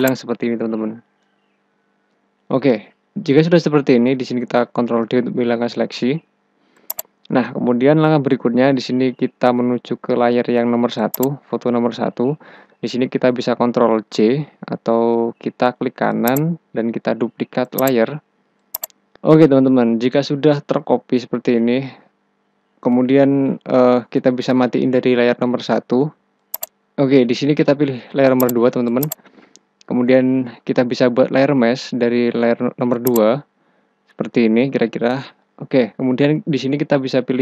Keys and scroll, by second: 4.6 ctrl+d, 13.8 ctrl+j.